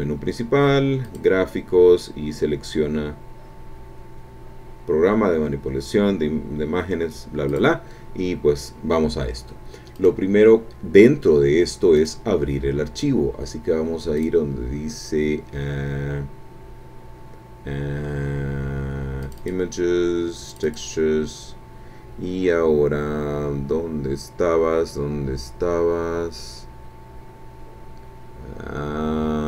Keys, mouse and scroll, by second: 1.0 click, 5.2-5.6 scroll down 1, 7.5 click, 9.9 click, 12.0 click, 14.2 click, 19.2 click, 20.5 click, 22.0 scroll down 1, 23.3-23.9 scroll down 1, 24.0-24.3 scroll down 1, 24.6-25.5 scroll down 4, 25.9-26.5 scroll down 4, 27.1-27.5 scroll down 2, 28.3-28.6 scroll down 2, 28.8-29.3 scroll down 2.